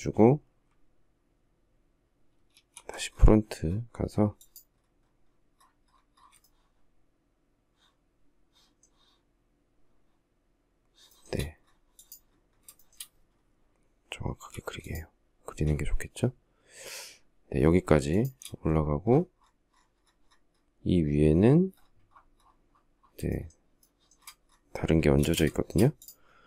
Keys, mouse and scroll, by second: 2.9 alt+f, 6.2 shift+middle click, 10.9 shift+middle click, 12.6 shift+middle click, 14.3 m, 17.9 shift+click, 23.1 shift+middle click, 23.6 shift+middle click, 25.0 space, 25.3 shift+middle click.